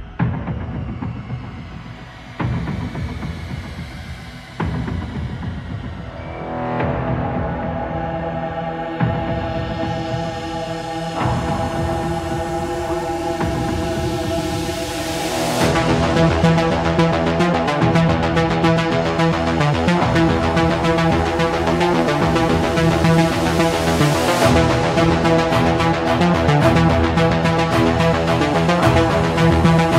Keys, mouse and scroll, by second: 0.6-1.7 drag, 2.9 click, 5.1 typing, 5.8 Return, 7.6-8.3 middle drag, 8.3 Escape, 8.6 Escape, 8.9 Escape, 13.3 ctrl+click, 15.3 click, 16.2 click, 17.8-18.9 scroll, 19.4 click, 21.3 click, 24.0 click, 26.5-27.0 typing, 28.9 typing, 29.5 Return.